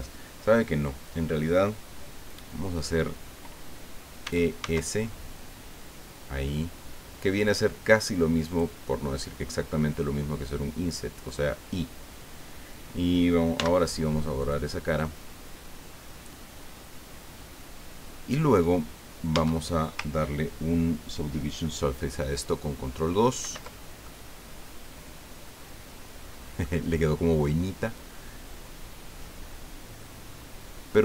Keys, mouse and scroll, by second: 4.2 e, 4.6 s, 8.4 right click, 13.5 x, 14.4 right click, 14.9-18.6 middle drag, 19.3 Tab, 23.4 ctrl+2, 24.0-26.8 ctrl+drag.